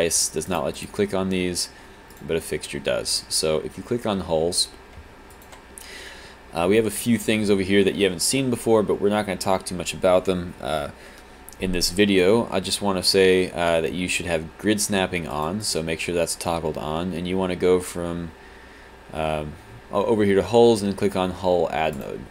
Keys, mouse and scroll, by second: 2.3 click, 5.3 alt+click.